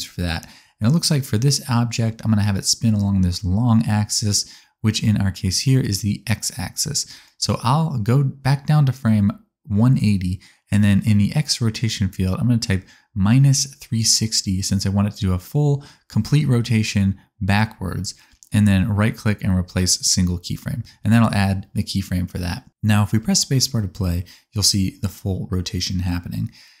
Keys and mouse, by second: 1.9-3.9 middle drag, 3.9-9.6 drag, 9.6-11.0 middle drag, 11.0-15.1 drag, 22.8 space.